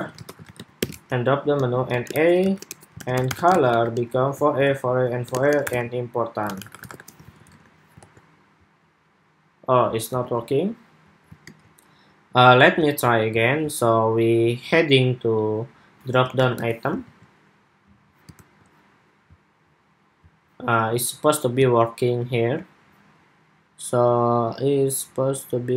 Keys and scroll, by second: 0.6 super+v, 7.0 super+s, 7.2 super+Tab, 7.8 super+r, 9.9 super+Tab, 16.8 super+s, 18.0 super+r.